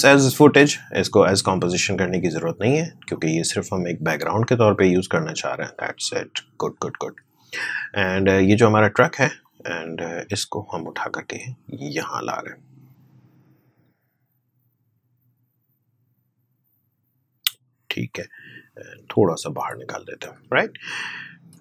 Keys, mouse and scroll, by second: 1.5-7.0 drag, 8.0-21.6 drag.